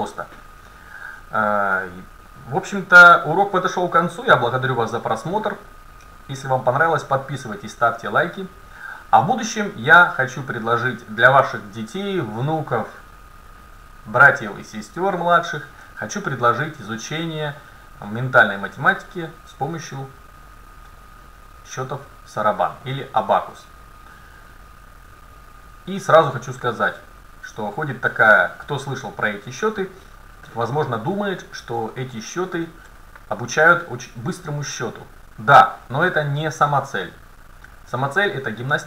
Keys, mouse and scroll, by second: 32.5-34.4 middle drag.